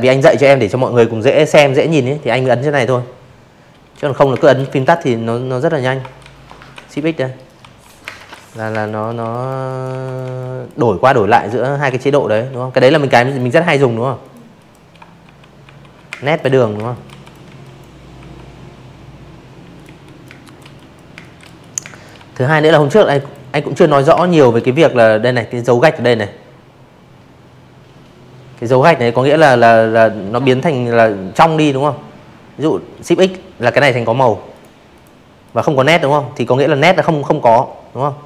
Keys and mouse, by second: 0.9 z, 1.0 click, 1.3 space, 1.3 click, 1.5 z, 1.7 click, 3.1-7.2 typing, 4.8 click, 5.1 click, 5.4 click, 5.8 click, 6.2 click, 6.6 click, 7.0 click, 7.3 click, 8.3-10.6 typing, 10.2 click, 11.2 click, 11.5 click, 12.2-15.1 typing, 13.2 click, 13.6 click, 13.9 click, 14.2 click, 14.6 click, 16.7 click, 16.8-19.1 typing, 17.0 click, 17.4 click, 17.7 click, 18.2 click, 18.5 click, 18.9 click, 19.8 click, 20.1 click, 21.1 space, 21.2 click, 30.5 shift+x, 31.5 click, 31.9 click, 32.4 click, 35.9 click, 36.0 click, 37.1 click.